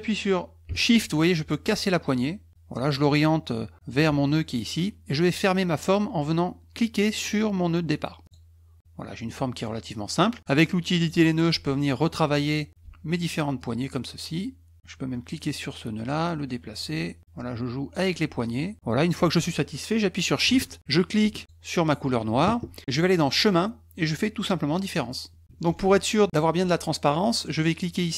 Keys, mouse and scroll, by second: 8.2 click, 11.0 click, 12.3 click, 13.6-14.8 drag, 15.1 drag, 15.9 click, 17.2 click, 18.7 click, 23.3 click, 24.8 click.